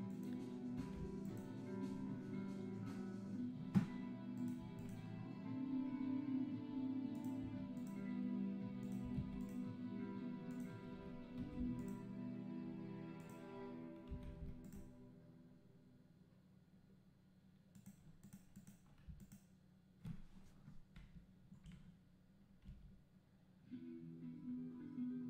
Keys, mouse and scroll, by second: 1.3 click, 4.8 click, 7.8 click, 9.4 click, 11.8 click, 14.7 KP_0, 18.3 click, 18.6 click, 22.7 g.